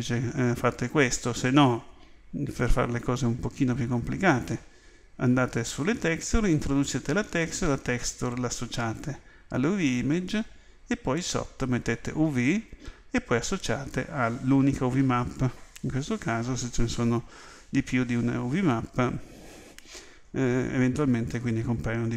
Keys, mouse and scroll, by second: 3.0 click, 10.7-12.8 scroll up 1, 12.8 scroll up 1, 13.0-22.1 scroll down 1.